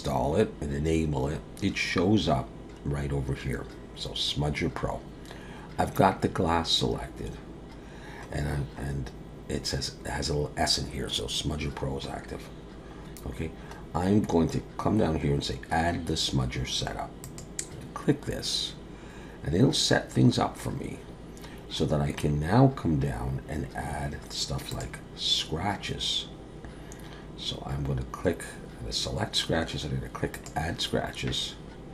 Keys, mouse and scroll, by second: 7.9-8.6 scroll down 1, 8.6-9.0 scroll down 1, 11.8-13.0 scroll down 1, 13.0-13.8 scroll down 2, 13.8-14.4 scroll down 2, 17.2 click, 20.5-21.9 scroll down 3, 21.9-24.7 scroll down 2, 24.7 click, 30.3 click.